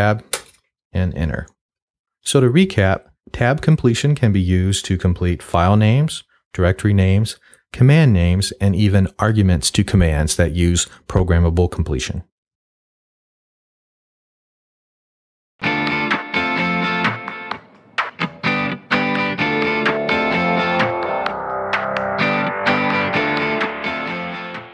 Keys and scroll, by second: 0.3 Return.